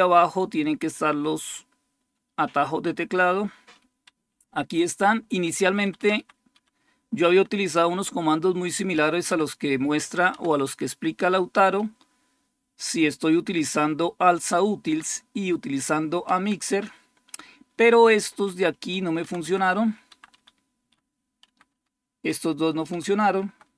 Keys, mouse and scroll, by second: 0.0-2.0 typing, 2.6 Page_Down, 3.9 Up, 4.1-5.3 Up, 5.5 Up, 5.7 Up, 5.8 Up, 6.0 Up, 6.4 Up, 7.1 Down, 8.9-9.6 typing, 10.1 Down, 11.6-13.7 Right, 13.7-14.7 Right, 16.1 Down, 18.2 Left, 18.5 Left, 19.1 Down, 19.9 Up, 20.2 Up, 21.3 Down, 21.6 Down, 22.7 Up, 23.2 Right, 23.5 Right.